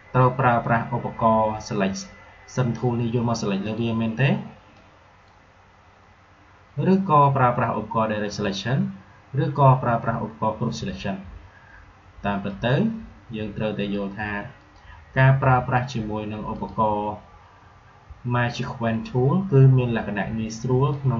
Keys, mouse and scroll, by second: 3.6-9.9 drag, 12.4 right click, 13.7 click, 20.8-21.1 drag.